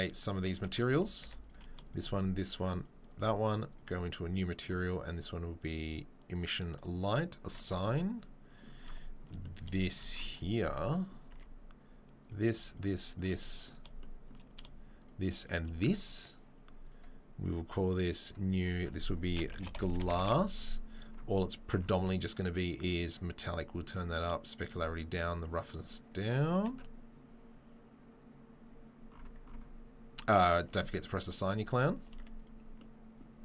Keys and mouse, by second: 0.9 2, 1.2 3, 1.4 click, 1.5 shift+middle click, 1.8 shift+click, 2.5-8.9 shift+middle drag, 3.7-8.9 drag, 8.9 Tab, 8.9-10.7 shift+right drag, 10.7-12.7 middle drag, 12.3 Tab, 12.7 shift+right click, 12.8 shift+middle click, 13.1 shift+right click, 13.2-15.0 shift+middle drag, 15.0 shift+right click, 15.1 shift+middle click, 15.3 shift+right click, 15.4-19.4 shift+middle drag, 16.8-19.4 drag, 16.8-23.2 right drag, 19.7-23.2 drag, 19.7-23.2 middle drag, 26.6 Tab, 30.7 Tab, 32.1 Tab.